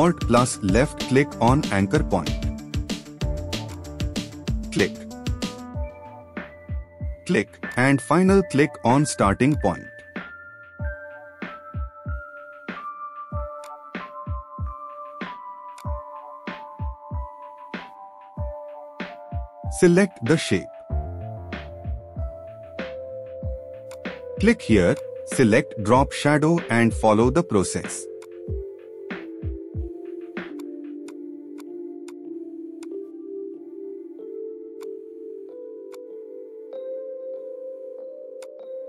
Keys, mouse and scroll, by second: 0.7 alt+click, 4.5-5.3 scroll up 1, 10.7-11.1 scroll down 1.